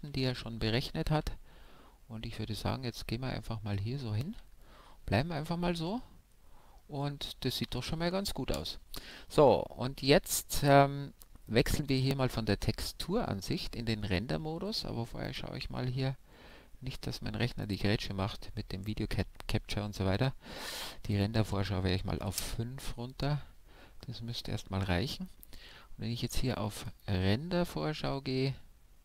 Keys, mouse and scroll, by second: 2.7 Right, 4.2 Left, 5.6 middle click, 5.8 middle click, 7.1 middle click, 7.9 ctrl+s, 12.2 click, 15.2-20.5 drag, 16.0-21.1 middle drag, 21.1-22.8 drag, 26.8-28.6 drag.